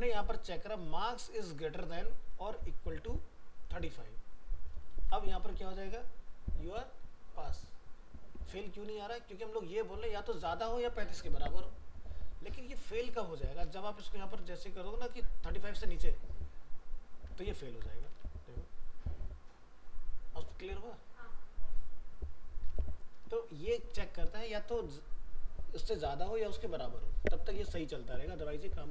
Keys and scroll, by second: 4.9 ctrl+s, 5.4 alt+Tab, 17.6 ctrl+s, 18.2 alt+Tab, 22.7 alt+Tab.